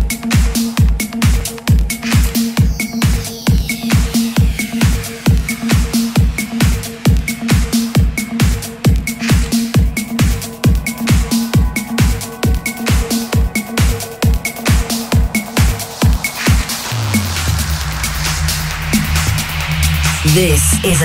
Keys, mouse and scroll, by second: 3.2 ctrl+d, 7.3-12.8 drag, 16.4 KP_0.